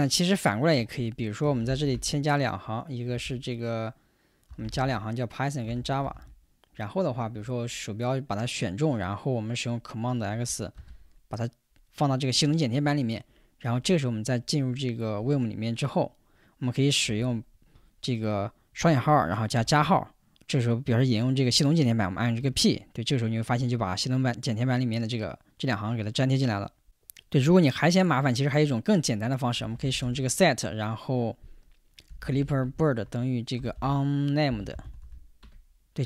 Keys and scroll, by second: 0.8 Return, 1.0 Return, 1.2-2.4 typing, 3.1 ctrl+h, 4.3-6.6 typing, 10.8 super+x, 17.1 o, 17.5 Escape, 18.8 shift+', 22.4 p, 29.4-30.5 typing, 31.9-35.5 typing.